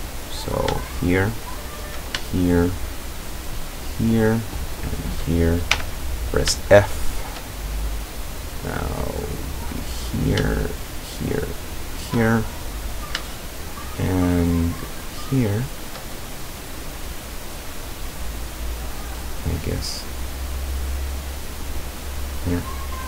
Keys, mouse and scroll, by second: 0.3 right click, 1.3 shift+right click, 3.1 shift+right click, 3.5-4.2 shift+middle drag, 4.8 shift+right click, 5.8 f, 6.7-7.5 shift+middle drag, 10.0 right click, 11.0 shift+right click, 11.9 shift+right click, 12.3-14.2 shift+middle drag, 14.9 shift+right click, 16.3 shift+scroll down 1, 16.6-22.7 middle drag.